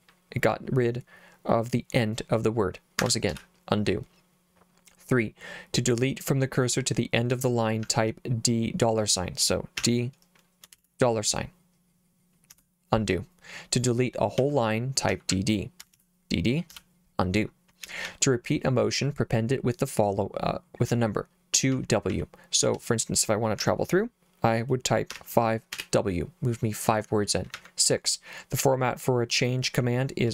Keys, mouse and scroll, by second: 3.0 Escape, 3.3 u, 7.3 j, 7.8 h, 9.8 d, 10.7 shift+4, 12.5 u, 14.4-16.7 typing, 17.8 j, 18.0 j, 18.2 j, 18.5 j, 21.7 k, 22.1 k, 22.7 l, 23.6 h, 25.1 5, 25.7 w, 27.6 j.